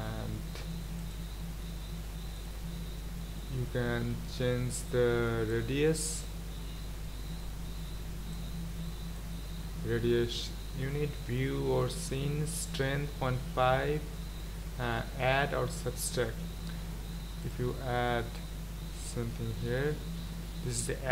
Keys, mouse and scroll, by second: 5.6-17.6 drag, 18.4-21.1 drag.